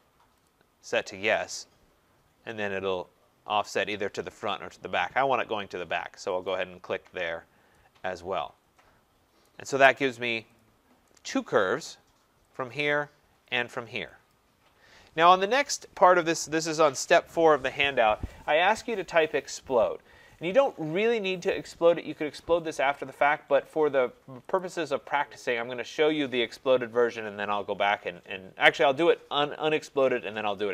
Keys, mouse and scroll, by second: 0.4 click, 6.5 click, 7.3 scroll, 9.5 right click, 10.0-10.5 scroll, 10.6 click, 11.6 right click, 12.7 click, 13.6 click, 14.1 scroll, 14.3 click, 24.6 click.